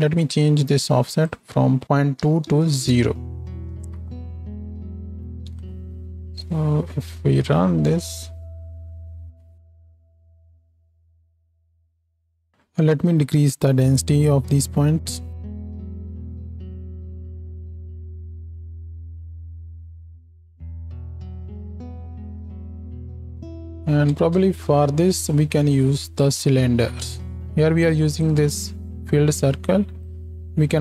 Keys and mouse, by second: 3.8 alt+a, 4.4 z, 5.3 z, 6.3 z, 7.2 space, 11.9 shift+Left, 15.0 shift+Left, 15.6 space, 25.3 ctrl+space, 28.2 click.